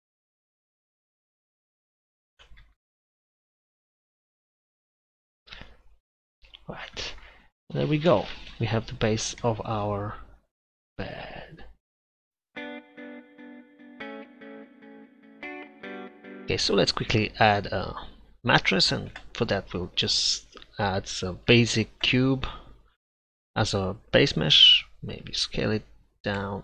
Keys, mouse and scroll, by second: 2.4 g, 3.9 g, 8.2 space, 16.9-18.5 middle drag, 19.2 shift+a, 23.4 Tab, 24.3 s, 26.4 Tab.